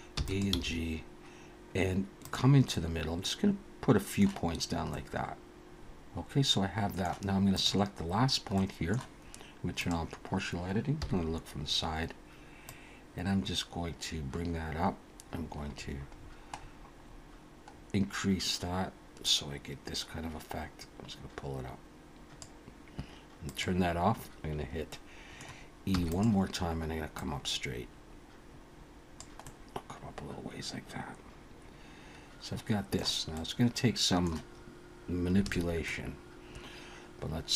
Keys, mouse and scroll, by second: 0.1 e, 0.5 g, 2.7 middle click, 4.9 middle click, 5.5 alt+a, 5.5 click, 7.4 click, 8.5 middle click, 9.8 click, 11.0 KP_1, 12.7 click, 23.5 click, 24.9 middle click, 25.9 e, 27.2 click, 29.4 middle click, 33.3 middle click, 35.4 alt+a, 35.8 middle click.